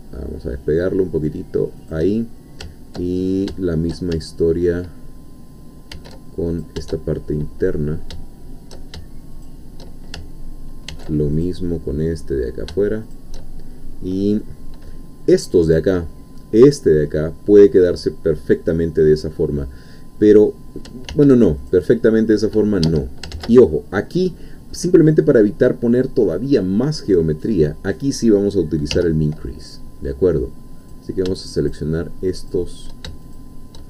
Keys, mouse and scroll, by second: 1.8 shift+click, 3.2 ctrl+scroll up 1, 3.5 shift+middle click, 5.9 ctrl+r, 6.5 ctrl+click, 9.3 shift+click, 10.9 ctrl+r, 11.3 ctrl+click, 13.1 shift+click, 14.4-15.5 middle drag, 16.0-17.9 middle drag, 18.2-20.9 scroll up 2, 21.1 ctrl+r, 21.7 ctrl+click, 22.9 Escape, 23.4 ctrl+z, 24.4 scroll down 2, 24.7-27.5 middle drag, 27.5 scroll up 2, 30.9 click, 31.6 shift+click, 32.5 shift+click, 33.3 shift+click.